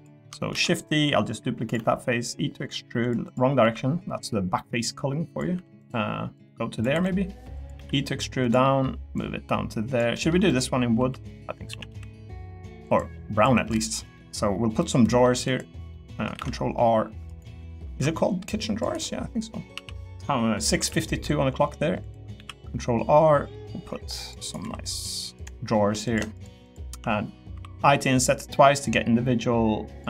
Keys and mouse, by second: 0.5 shift+d, 1.7 e, 3.6 l, 4.2 click, 5.5 3, 5.8 click, 6.9 3, 7.0 middle click, 7.5 click, 7.7 e, 8.6 middle click, 9.2 click, 10.1 middle click, 10.5 click, 11.0 l, 11.7 a, 11.9 g, 12.8 click, 13.4 3, 13.7 click, 14.1 middle click, 14.8 middle click, 15.4 click, 15.9 middle click, 16.3 ctrl+r, 17.9 ctrl+r, 19.7 s, 20.8 y, 22.3 ctrl+r, 24.6 3, 24.8 click, 25.3 click, 26.3 shift+click, 27.5 i, 27.8 i.